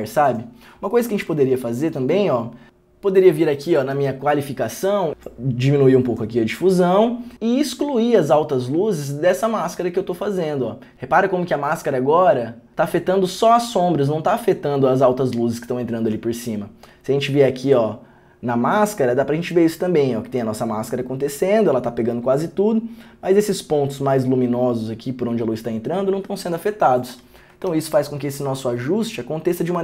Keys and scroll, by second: 27.9 ctrl+d, 28.4 ctrl+d.